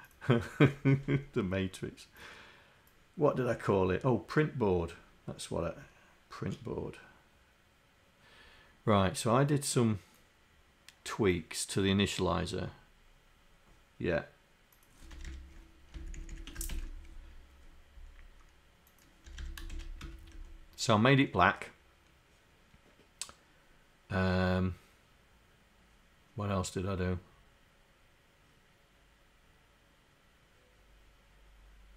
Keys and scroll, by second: 15.3 Home, 16.0 shift+Down, 16.8 ctrl+Insert.